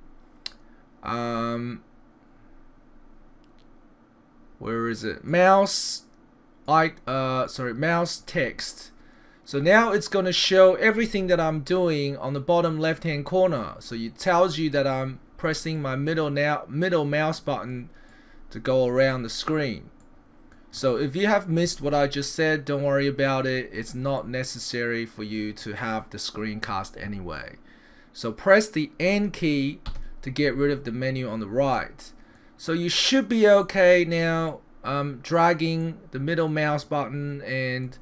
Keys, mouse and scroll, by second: 5.3-7.0 drag, 7.4-8.3 drag, 12.7 middle click, 14.9 middle click, 15.7 middle click, 18.1 middle click, 19.0 middle click, 20.0 middle click, 24.2 middle click, 25.6 middle click, 29.9 n, 31.7 middle click, 32.7 middle click, 33.6 middle click, 34.5 middle click, 35.8 middle click, 36.8 middle click.